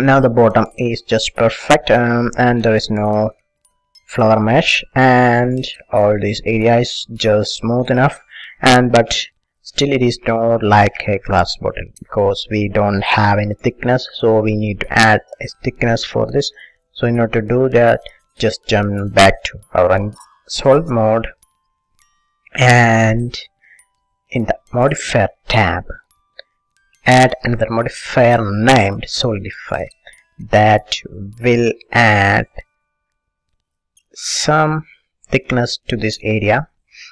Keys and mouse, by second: 16.5 click, 19.1-21.2 middle drag, 21.6-24.6 middle drag, 24.6 click, 25.2 middle click, 25.4-26.4 drag, 27.1-28.8 drag, 29.8-33.2 middle drag, 33.6-37.1 middle drag.